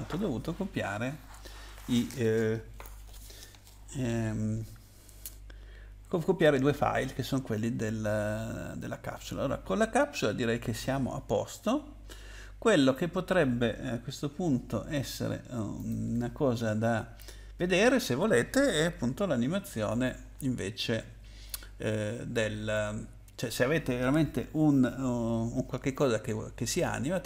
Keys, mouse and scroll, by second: 14.3 Escape, 15.8 click.